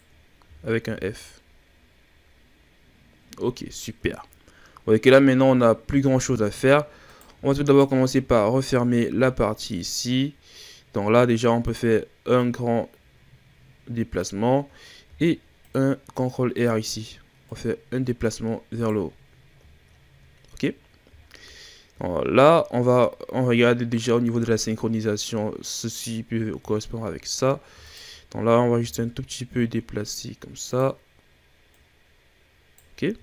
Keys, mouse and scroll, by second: 0.4 f, 0.8 a, 0.9-2.6 scroll down 9, 2.6-3.5 scroll up 5, 3.5-4.4 ctrl+scroll down 3, 4.4-5.6 scroll up 1, 5.6-7.1 shift+scroll up 5, 7.1 right drag, 7.6 shift+right click, 8.2-9.0 shift+scroll up 5, 9.0 shift+scroll up 1, 9.1 e, 12.3-14.5 drag, 14.5-15.1 scroll up 1, 15.1 ctrl+r, 16.8-17.5 scroll up 2, 17.5 right click, 19.1-20.6 scroll down 9, 20.6-21.1 scroll up 1, 21.1-22.4 shift+scroll up 2, 26.7-27.8 shift+scroll up 10, 27.8 shift+right click, 28.7 g, 31.7 right click, 32.9-33.2 scroll down 7.